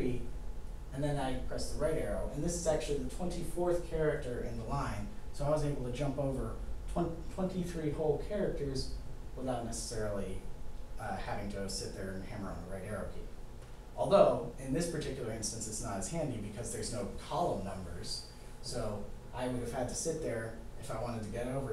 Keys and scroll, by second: 1.8 Right.